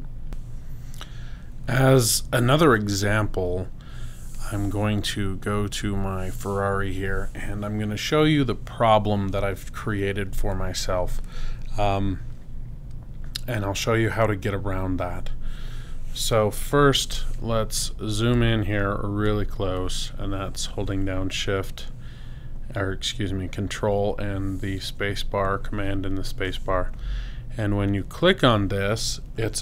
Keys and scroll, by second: 18.3 super+space.